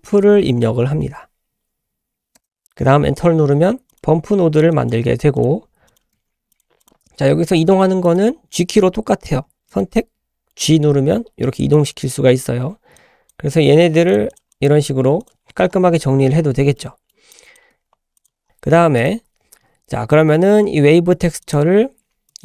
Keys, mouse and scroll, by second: 4.7 drag, 5.1 g, 5.9 click, 6.1 g, 6.8 click, 7.6 click, 8.1 click, 9.7 click, 10.6 g, 12.1-12.5 scroll down 4, 13.0-13.4 drag, 13.5 g, 14.3 click, 14.5 drag, 14.8 g, 15.4-16.4 scroll up 4, 16.4-16.7 scroll down 3, 16.8 middle click, 17.3 drag, 17.7 g, 18.4 middle click, 19.0 click, 19.2-19.8 scroll up 4, 21.5 click, 22.3 click.